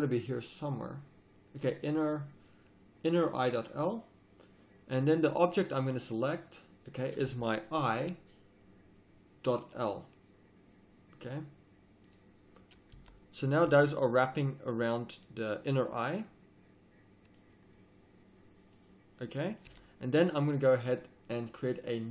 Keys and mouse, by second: 6.9-11.4 drag, 12.9 z, 13.6 z, 18.4 middle click, 19.6 middle click, 19.7 z, 20.5-21.2 drag.